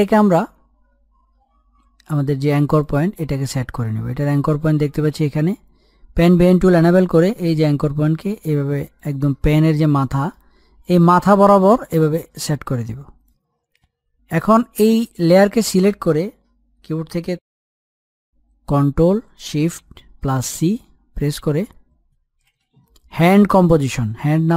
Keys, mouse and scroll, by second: 0.1-0.4 scroll up 1, 3.0 click, 7.8-9.4 drag, 9.4-10.2 scroll up 1, 10.2 middle click, 11.3-13.8 drag, 14.0-15.1 scroll down 1, 15.1 click, 18.2 ctrl+shift+c, 22.2-23.4 typing.